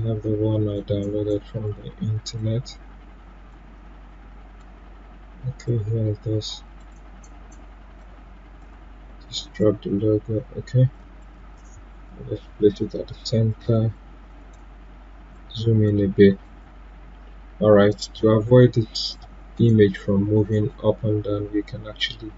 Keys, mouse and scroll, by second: 4.0-5.6 scroll up 1, 5.6-9.3 drag, 12.4 p, 14.3-18.8 drag, 20.5 right click.